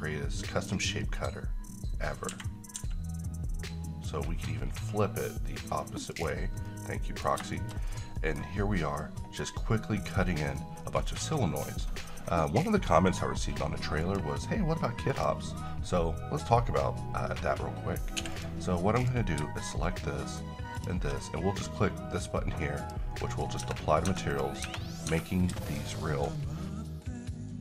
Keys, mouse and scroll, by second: 6.1 click, 6.6 middle click, 6.7-7.3 middle click, 7.9 scroll down 1, 8.2 middle click, 10.6-11.1 middle drag, 14.0 click, 18.1 x, 18.3 click, 20.7 shift+click, 22.8 click, 23.6 Tab, 24.3 click, 24.6 Tab, 25.7 click, 26.1 shift+middle click, 26.4 scroll up 1.